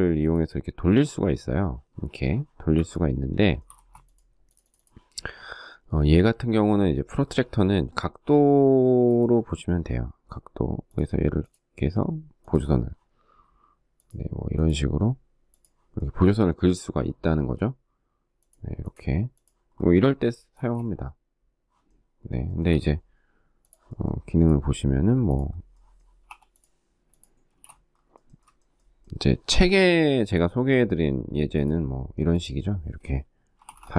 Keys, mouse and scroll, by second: 1.9 Escape, 2.5 shift+middle click, 2.9 space, 6.6 shift+middle click, 19.7 space, 21.6 shift+middle click, 25.4 p, 26.6 space, 27.3 shift+middle click, 27.5 shift+middle click, 32.5-33.7 typing.